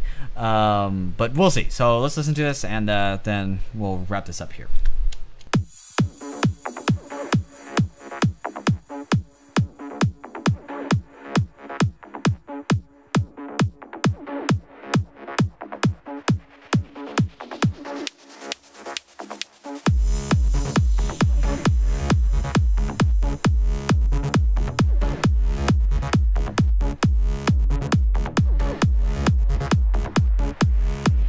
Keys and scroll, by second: 4.8 Return, 5.2 space.